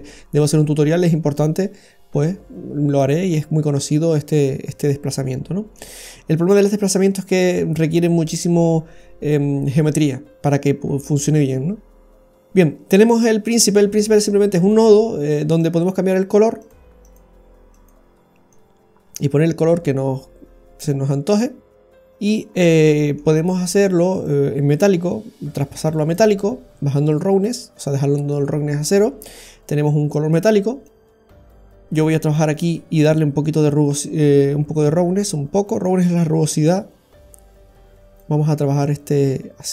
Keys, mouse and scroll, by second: 4.0-5.2 scroll down 1, 5.2 middle click, 14.0 click, 17.7 click, 22.2-22.8 scroll up 4, 22.8 middle click, 23.3-24.0 scroll up 3, 24.2 click, 26.9 click, 30.8 click, 33.4 click, 38.8 click.